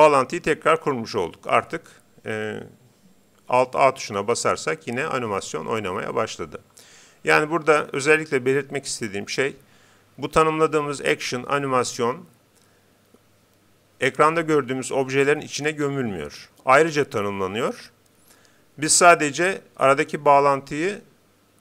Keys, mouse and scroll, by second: 4.4 alt+a.